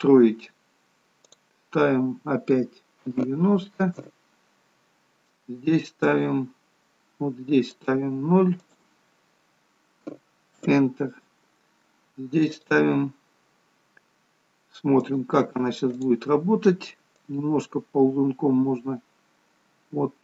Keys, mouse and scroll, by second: 1.4 click, 6.2 click, 8.8 click, 12.7 click, 17.3 click.